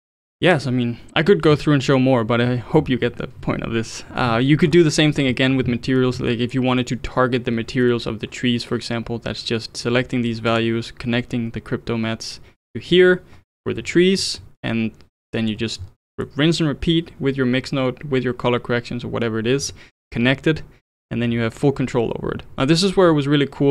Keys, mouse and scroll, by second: 4.7-7.7 scroll up 4, 10.5 click, 15.3 middle drag, 15.6-16.1 scroll down 6, 16.1-19.1 middle drag.